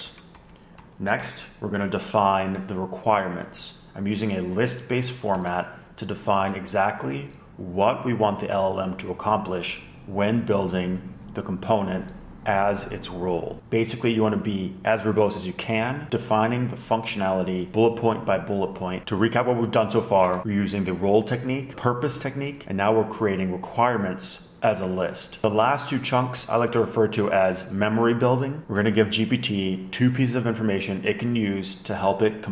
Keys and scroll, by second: 0.0 shift+super+Right, 0.6 shift+super+Left, 1.1 Down, 1.4 Down, 1.8 shift+super+Right, 5.1 Left, 5.3 Down, 5.5 Down, 6.1 shift+Down, 6.3 shift+Down, 13.6 shift+Down, 25.4 BackSpace, 28.0 super+Right, 28.2 shift+super+Left.